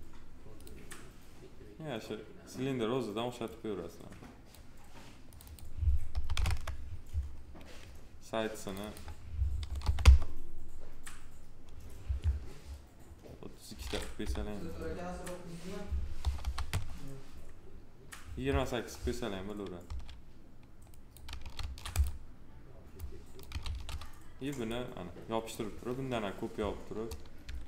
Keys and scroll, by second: 6.0 1, 6.3 Return, 9.5 3, 9.8 Return, 14.1 p, 16.0 2, 16.5 Return, 19.7 s, 21.4 ctrl+z, 23.5 ctrl+z, 27.3 s.